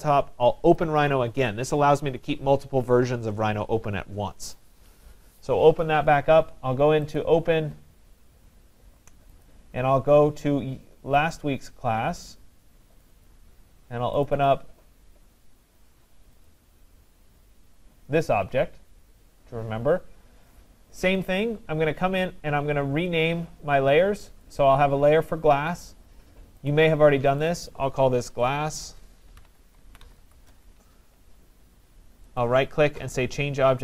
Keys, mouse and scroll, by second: 0.8 click, 1.1 click, 7.2 click, 9.5 click, 11.3 click, 13.1 click, 13.3 click, 14.3 click, 14.5 click, 16.5 click, 21.4 click, 24.6 click, 26.8 click, 27.5 click, 27.7 click, 28.9 click, 29.2-30.8 typing, 32.0-32.8 typing, 32.4 right click.